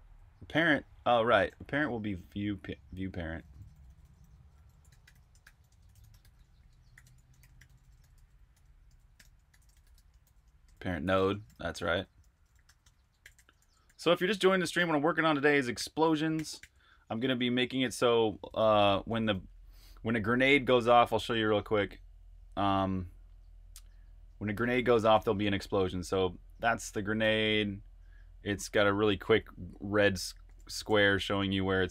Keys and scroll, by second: 0.0-15.7 typing, 18.5-20.2 typing, 19.0 super+r, 25.2-27.3 typing, 28.3-31.9 typing.